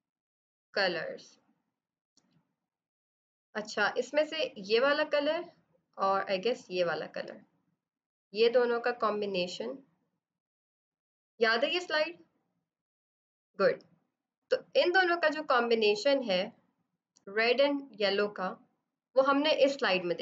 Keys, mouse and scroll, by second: 4.5 click, 10.8 b, 14.0 click.